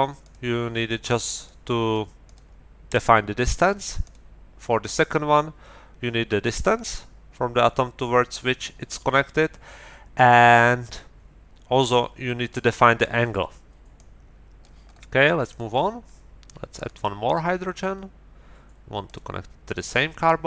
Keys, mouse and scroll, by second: 0.2 click, 1.4 click, 2.2 click, 4.0 click, 14.0 middle click, 15.5 middle click, 17.2 middle click, 19.0 middle click.